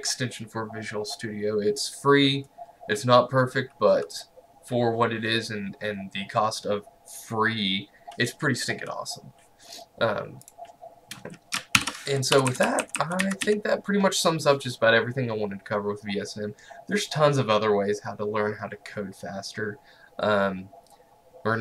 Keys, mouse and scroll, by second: 10.5 click, 11.8 ctrl+alt+l, 12.4 Up, 13.3 Left.